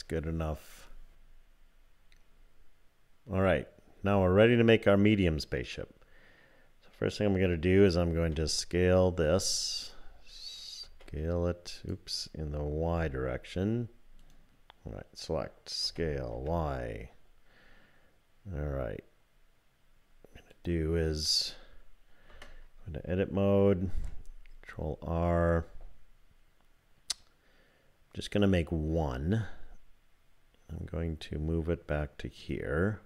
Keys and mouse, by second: 9.3 click, 10.8 s, 12.9 y, 14.2 click, 15.8 s, 22.3 Tab, 23.9 ctrl+r.